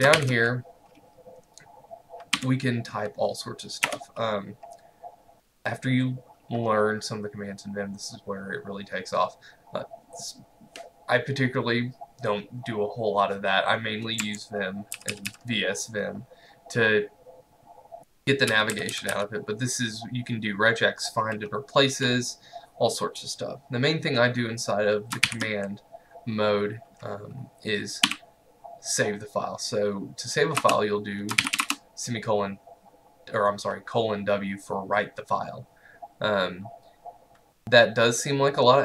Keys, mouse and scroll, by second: 0.4 shift+;, 2.4 w, 3.9 BackSpace, 14.2 Escape, 15.0 k, 15.2 k, 15.3 k, 18.6 j, 18.8 j, 19.0 j, 19.2 j, 25.3 ;, 28.1 w, 30.6 Return, 31.2-32.1 typing.